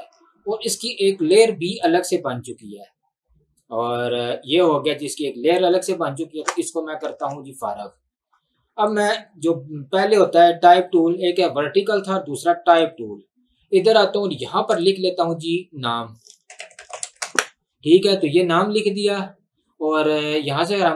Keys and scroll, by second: 6.4 ctrl+z, 7.3 ctrl+z, 16.3-17.8 typing.